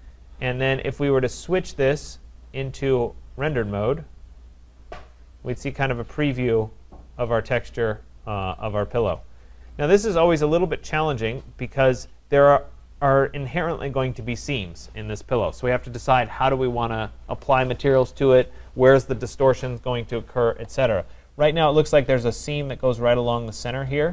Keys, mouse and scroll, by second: 0.2-0.9 typing, 0.6 click, 2.1 click, 3.5 click, 5.4-6.7 scroll, 6.9 scroll, 9.0-9.4 scroll, 9.6 scroll, 10.7 scroll, 11.5 click.